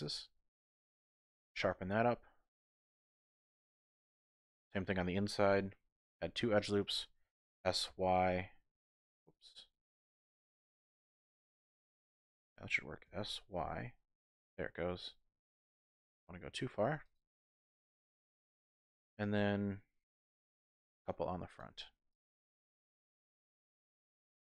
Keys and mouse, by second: 1.5 click, 1.6 typing, 2.4 middle click, 3.1 click, 4.5 middle click, 5.6 ctrl+r, 6.7 click, 7.5 s, 7.9 y, 9.2 click, 10.3 z, 11.3 middle click, 12.1 z, 13.0 s, 13.6 y, 17.0 click, 18.2 middle click, 19.0 typing, 20.1 ctrl+r, 21.5 click, 21.7 ctrl+r, 23.0 click, 23.3 middle click, 24.1 click.